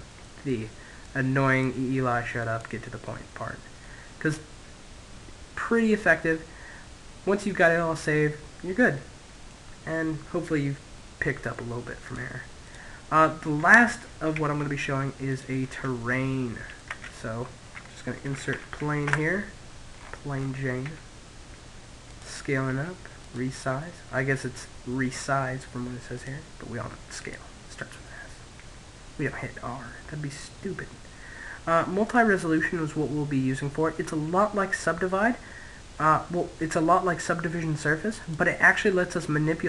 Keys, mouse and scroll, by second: 1.5 click, 2.6 middle click, 7.5-9.2 middle drag, 9.6-10.6 middle drag, 11.3 click, 12.8 x, 14.5-16.4 middle drag, 15.5 space, 18.4 middle click, 19.3 s, 20.7-23.8 drag, 21.3 s, 24.6-27.5 drag, 31.6-33.5 middle drag, 36.7-39.6 drag.